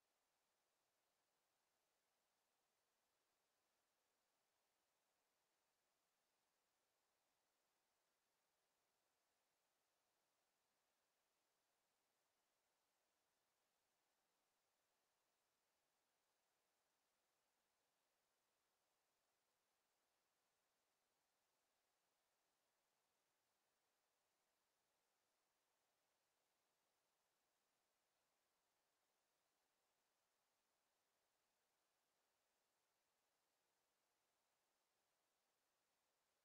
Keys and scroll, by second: 24.8-25.7 typing, 26.4 Return.